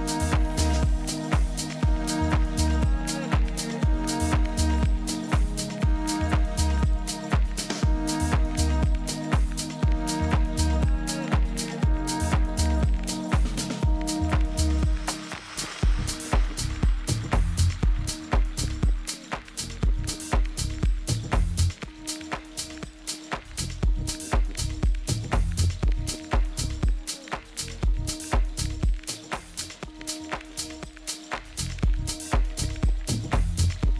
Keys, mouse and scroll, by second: 3.2-13.1 middle drag, 4.2 z, 5.0 z, 13.1-16.5 drag, 17.5-19.1 middle drag, 18.4 Tab, 19.0-21.0 typing, 22.7-24.4 drag, 23.4 a, 23.7 a, 27.0 b, 33.0 Delete.